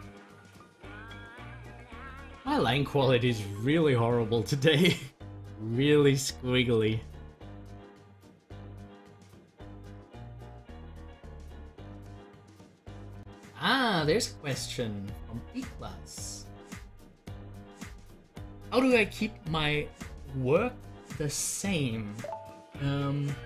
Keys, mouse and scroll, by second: 14.4-20.9 drag.